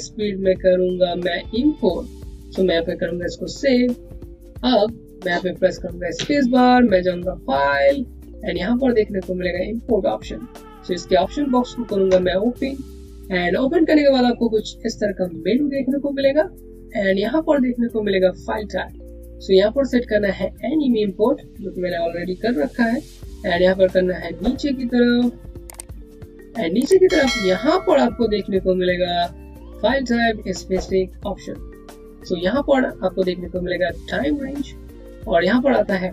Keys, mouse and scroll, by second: 3.4 click, 10.6 space, 13.3 click, 19.4 click, 23.8 click.